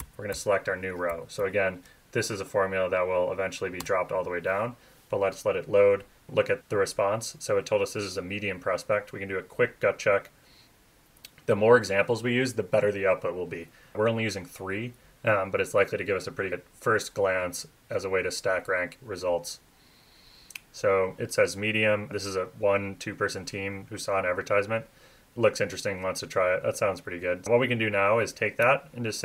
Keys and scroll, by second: 0.0 shift+super+Left, 1.1 shift+Left, 1.4 shift+Right, 3.8 Return.